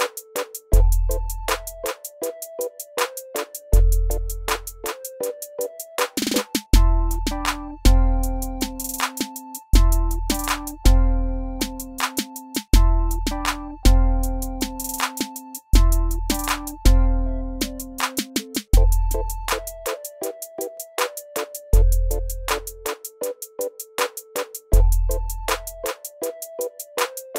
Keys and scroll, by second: 0.1 alt+w, 4.2 alt+w, 5.4 w, 8.6 r, 11.1 w, 12.9 alt+w, 14.9 F4, 26.9 alt+F4.